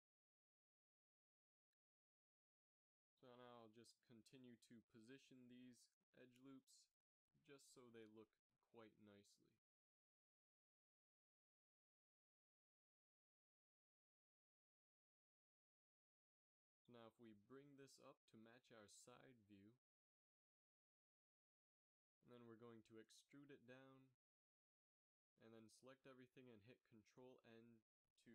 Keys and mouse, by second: 1.7 middle click, 3.0-4.8 drag, 4.2 s, 10.3 s, 13.1 z, 14.2 a, 15.6 KP_3, 17.6 a, 18.2 g, 23.4 e, 27.0 a, 27.2 a, 28.2 ctrl+n.